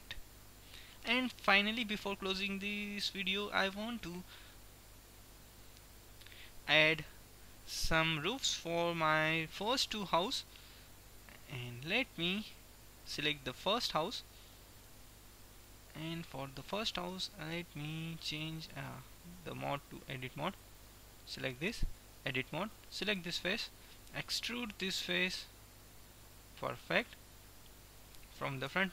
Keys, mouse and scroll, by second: 3.4-4.9 drag, 6.4-8.3 drag, 8.6-10.8 middle drag, 10.8-13.3 drag, 12.4-13.8 middle drag, 14.4 KP_1, 18.9-20.9 drag, 20.6-21.8 right drag, 21.8 Tab, 23.4-24.6 middle drag, 24.9 e, 27.8-28.9 middle drag, 28.8 KP_1.